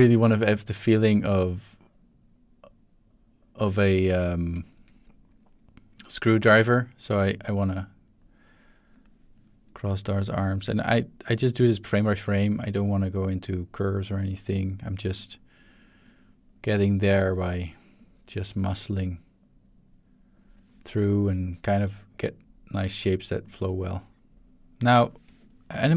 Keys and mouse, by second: 0.0-3.7 drag, 4.2 shift+middle drag, 4.7 ctrl+middle drag, 6.0 click, 7.1-8.9 drag, 10.4-10.9 drag, 11.7 drag, 12.6-14.6 drag, 15.2 click, 16.0-17.1 drag, 18.0-20.4 drag, 21.1 shift+middle click, 21.6-22.7 drag, 23.4 click, 24.3-25.0 drag, 25.5-25.8 shift+middle drag.